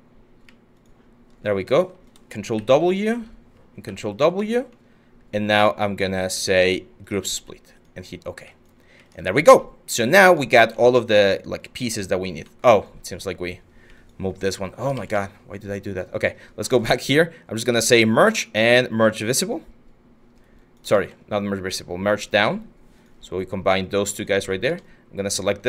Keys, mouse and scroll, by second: 2.2 ctrl+w, 3.5 ctrl+w, 14.5 ctrl+z, 14.7 ctrl+z, 20.5 ctrl+z, 25.5 w.